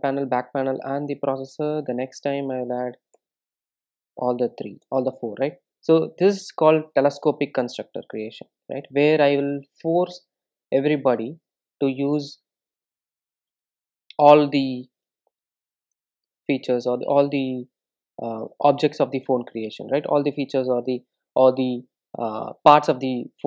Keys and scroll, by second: 2.0 super+n, 8.2 super+e, 17.3 ctrl+alt+super+/.